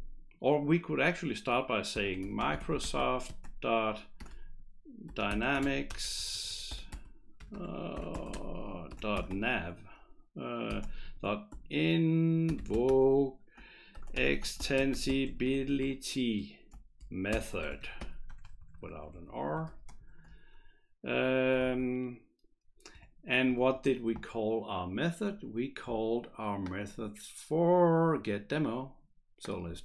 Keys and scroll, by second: 1.7-9.7 typing, 11.0-20.5 typing, 21.8 shift+', 22.9 BackSpace, 23.6 shift+'.